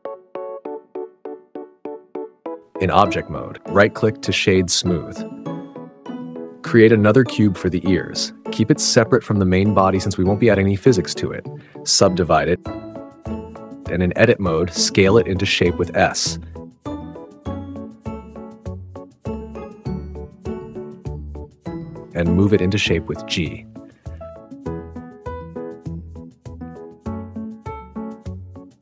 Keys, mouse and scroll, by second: 0.0 click, 0.7 s, 1.8 click, 2.9 Tab, 6.1 1, 7.2 shift+a, 11.2 click, 12.0 click, 12.8 click, 13.4-13.7 drag, 13.9 Tab, 14.6 click, 14.9 click, 16.9-18.5 typing, 19.9 s, 21.1 s, 21.9 Tab, 22.5 1, 22.9 g, 23.8 click, 24.0 r, 24.4-25.0 drag, 25.2-28.8 typing, 25.5 click, 25.9 click, 27.9 click, 28.7 click.